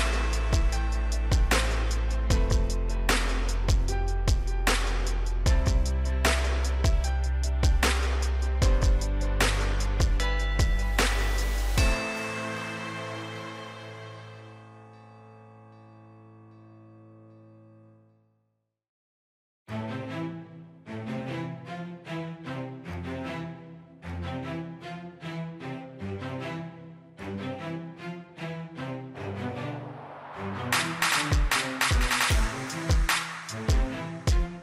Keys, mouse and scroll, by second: 1.9 ctrl+click, 3.7 click, 5.2 right click, 6.2 click, 6.7 scroll up 1, 8.1-8.8 scroll down 1, 9.4 scroll up 1, 10.5 scroll down 1, 11.7 click, 16.1 1, 17.5 Return, 18.9 click, 26.1-26.7 scroll up 1, 31.2 4, 32.5 Return, 34.0 click.